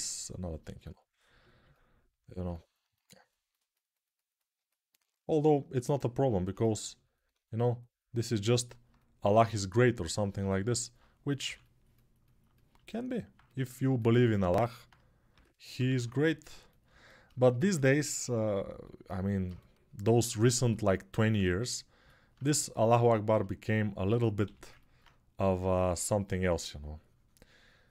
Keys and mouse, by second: 1.8 alt+right click, 2.5-10.4 drag, 11.2 6, 15.1 g, 15.5 ], 15.7 ], 17.6-27.9 alt+drag, 24.2 g.